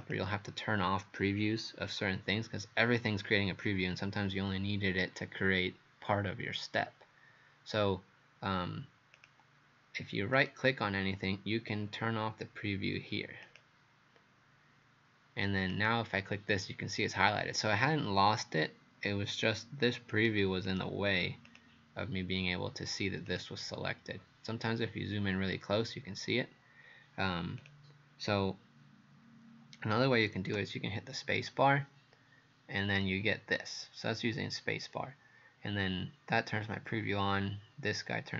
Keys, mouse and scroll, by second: 0.0 click, 10.4 right click, 13.5 click, 20.7 right click, 21.5 click.